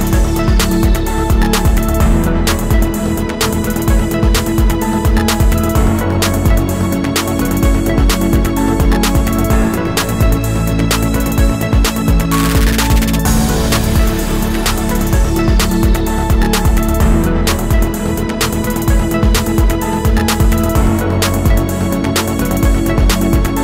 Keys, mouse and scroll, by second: 0.3 alt+click, 2.5 alt+click, 4.1 alt+shift+click, 5.5 ctrl+shift+a, 6.0 alt+click, 7.3 ctrl+shift+a, 7.7 alt+scroll down 1, 7.9 space, 9.0 space, 10.5 ctrl+shift+a, 10.9 space, 11.9 alt+click, 13.1 alt+scroll up 1, 14.5 alt+click, 15.6 space, 16.3 alt+click, 18.5 ctrl+shift+a, 19.3 alt+click, 20.5 alt+click, 21.4 alt+click, 22.2 alt+click, 23.3 space.